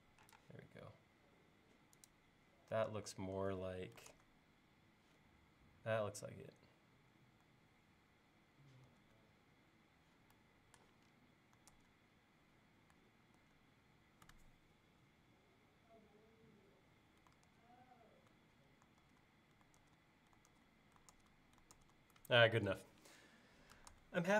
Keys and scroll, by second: 0.4 space, 4.2 super+Tab, 8.9 super+Tab, 11.8 super+Tab, 13.4 super+Tab, 17.5 super+Tab, 19.1 super+Tab, 19.8 super+Tab, 22.7 super+Tab, 24.0 super+Tab.